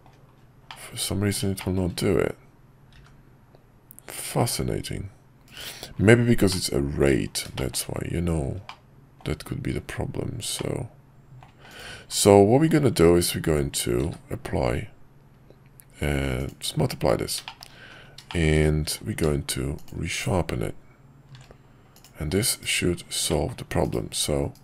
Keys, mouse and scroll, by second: 0.6-1.3 middle drag, 1.5 shift+middle drag, 6.4-7.0 middle drag, 7.5 shift+middle drag, 8.7 middle click, 10.5-11.4 middle drag, 12.5 q, 17.4 shift+middle click, 18.3 shift+middle click, 18.8 q, 21.9 click, 23.3 middle drag, 23.8 /.